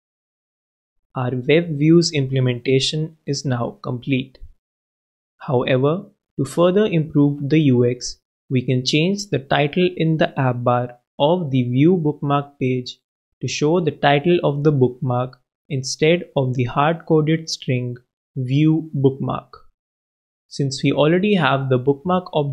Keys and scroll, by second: 17.4 shift+Left, 18.8 shift+b.